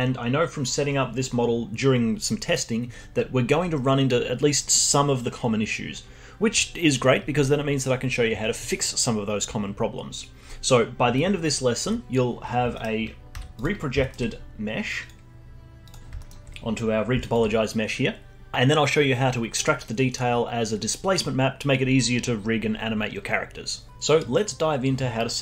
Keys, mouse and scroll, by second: 12.7 middle click, 13.3 z, 14.0-15.0 alt+middle drag, 15.0 click, 15.8 click, 16.1 alt+middle click, 16.9 scroll down 1, 17.2-19.6 alt+drag.